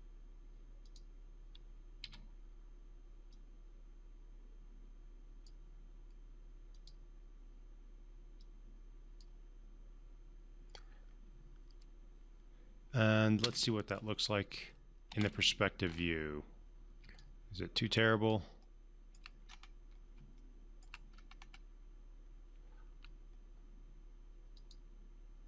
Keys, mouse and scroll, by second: 0.8 click, 2.0 w, 3.3-5.5 drag, 13.4 space, 15.8-17.0 scroll up 1, 17.2-18.4 alt+drag, 18.6-19.2 alt+middle click, 19.4-19.8 scroll up 2, 19.8 scroll down 1, 20.4-20.9 alt+middle click, 21.1-22.5 scroll up 1, 24.5-25.4 drag.